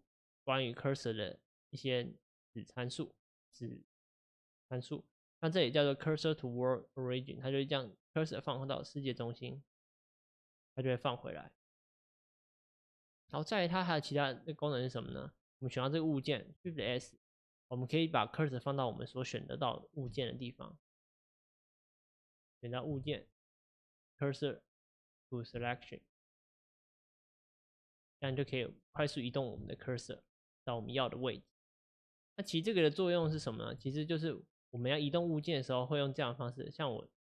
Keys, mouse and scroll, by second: 15.1 click, 16.8 shift+s, 21.2-22.3 middle drag, 22.3 click, 23.0 shift+s, 28.4 shift+s, 29.3 click, 29.6 shift+s, 33.4 shift+s, 35.0 click.